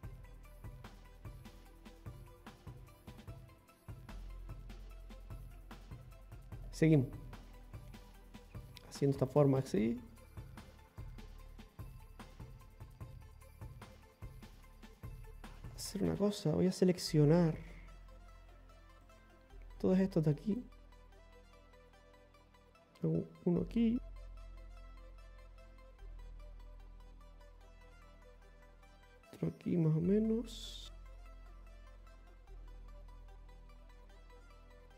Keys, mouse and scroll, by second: 0.1 ctrl+x, 0.1 ctrl+z, 1.1 click, 2.0 ctrl+z, 3.1 ctrl+z, 5.2 click, 7.0 click, 9.2 click, 11.1 click, 13.1 click, 14.9-15.3 scroll up 1, 15.4 ctrl+middle click, 15.6 click, 15.6-16.0 scroll up 2, 16.0 scroll down 1, 16.6 scroll down 1, 19.0 right click, 19.9 shift+right click, 20.5 right click, 21.6 shift+right click, 22.1 scroll down 1, 22.2 ctrl+z, 22.2 e, 31.0 middle click, 31.6 e, 31.9 right click, 31.9 scroll up 1, 32.1 shift+right click, 33.0 right click, 33.7 shift+right click, 34.8 f.